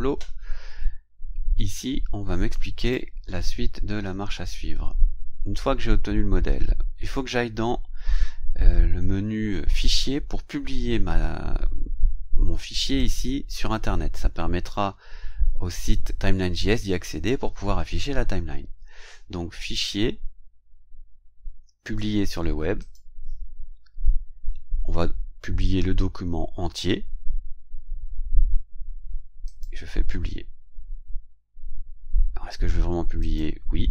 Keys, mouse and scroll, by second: 2.8 click, 4.8-5.6 scroll down 2, 6.3 scroll down 1, 7.0 scroll down 1, 13.0 click, 19.6 click, 22.8 click, 29.4 click, 33.2 click.